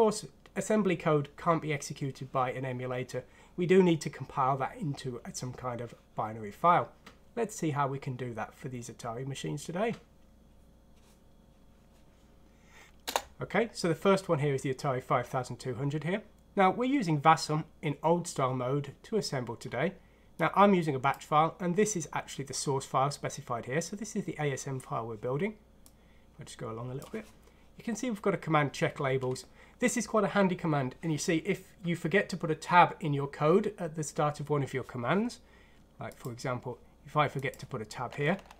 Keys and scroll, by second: 12.7 Return, 13.0 Return.